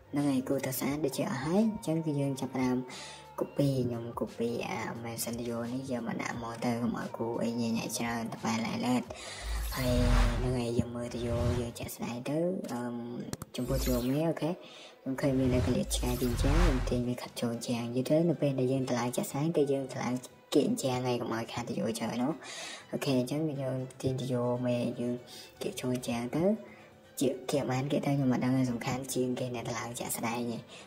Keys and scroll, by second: 2.5-2.9 typing, 4.1 typing, 6.9 Escape, 7.2 Escape, 15.6 Escape, 16.3-17.2 typing, 24.5 Escape, 24.6 Escape, 25.0 Escape, 25.2 Escape, 26.7-27.7 typing, 28.7 Escape, 29.1 space, 29.4 Escape, 30.3-30.7 typing.